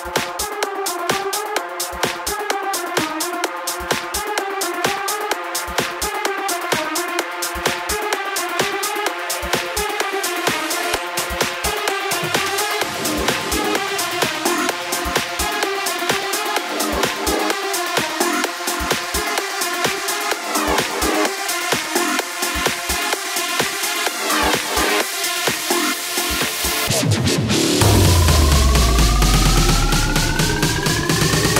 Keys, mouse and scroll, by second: 1.6 ctrl+z, 2.0 ctrl+z, 4.8-5.8 drag, 5.8 ctrl+z, 6.2 ctrl+z, 6.7 ctrl+z, 8.4-10.5 drag, 10.5 a, 12.8 ctrl+a, 13.9-17.5 drag, 17.5 ctrl+z, 19.3 click, 22.7 x, 23.4-26.8 drag, 26.8 i, 28.4-31.5 drag.